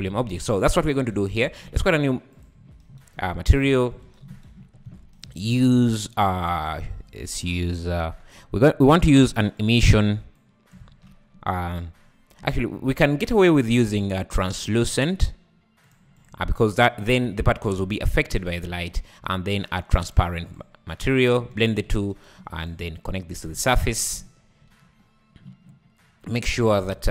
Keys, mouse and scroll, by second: 0.0 click, 0.6 click, 1.3 `, 2.3-2.8 drag, 3.1-3.7 scroll up 3, 3.7 click, 4.0 x, 4.9-5.5 scroll up 8, 5.5 shift+a, 6.6-9.7 drag, 10.4-10.8 drag, 10.8 shift+a, 12.9 shift+a, 16.6 click, 17.2 Delete, 18.0-18.4 scroll up 3, 18.7 shift+a, 20.1 shift+a, 21.0-21.5 drag, 21.5-22.1 ctrl+shift+right drag, 22.6 click, 23.1-23.8 drag, 24.6 `, 25.0 scroll up 4.